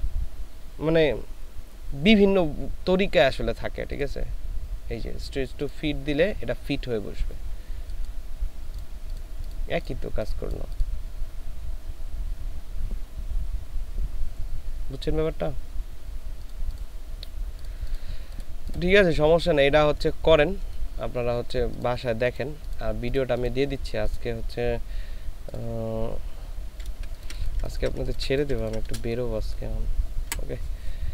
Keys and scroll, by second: 27.2 ctrl+space, 30.3 Delete.